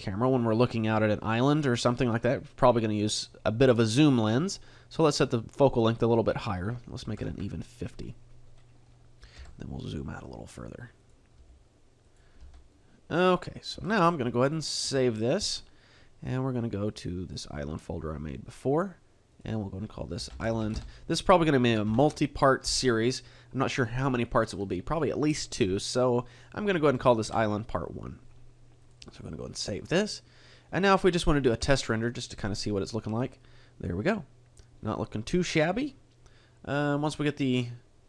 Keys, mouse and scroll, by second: 9.4 g, 11.4 click, 11.4 g, 12.1 click, 12.4 g, 13.4 click, 13.7 a, 29.2 click.